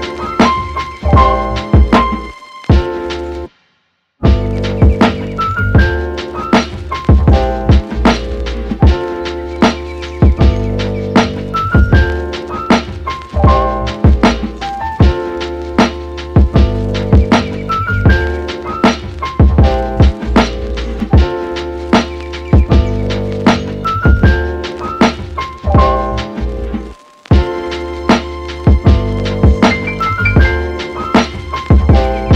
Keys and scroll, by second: 4.4 super+space, 12.7 space, 18.2 super+z, 19.6 super+z, 26.6 super+z.